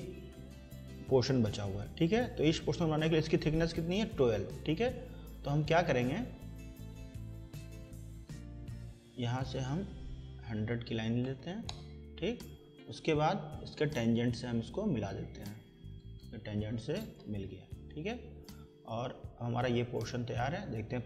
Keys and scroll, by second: 11.0 1, 11.2 0, 11.7 Return, 17.0 Escape.